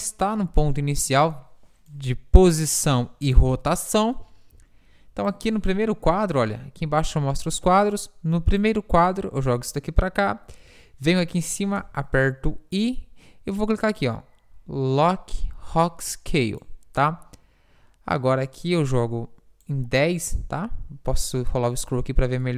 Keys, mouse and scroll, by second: 0.5 z, 1.3-3.2 drag, 5.5-7.6 drag, 8.7-11.8 drag, 13.9 i, 18.2-20.0 drag.